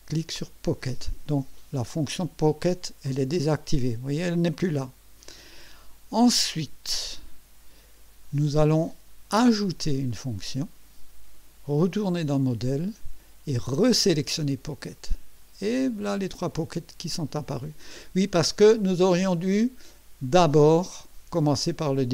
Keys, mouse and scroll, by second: 0.7 click, 3.0 click, 10.1 click, 12.0 click, 14.4 click.